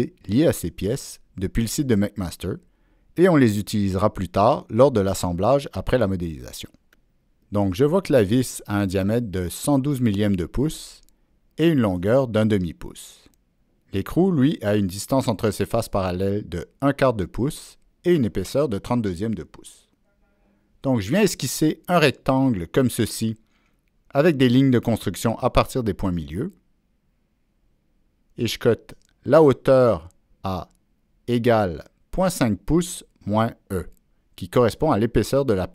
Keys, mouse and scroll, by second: 22.3-22.6 right drag, 24.0-25.8 drag, 26.3 right click, 27.7 click, 28.4 click.